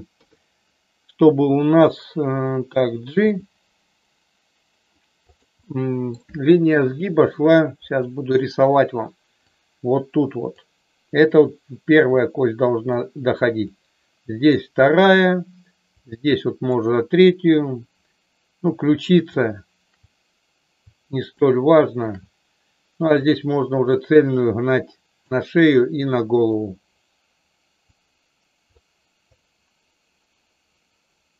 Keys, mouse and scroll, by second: 0.1 KP_3, 3.3 g, 5.1 click, 5.6 middle click, 7.9 click, 9.4-10.5 drag, 12.1 middle click, 13.6 click, 16.0 click, 21.4 shift+middle click, 23.3 click, 24.4 click, 26.0 click, 27.9 click, 29.3-31.3 drag.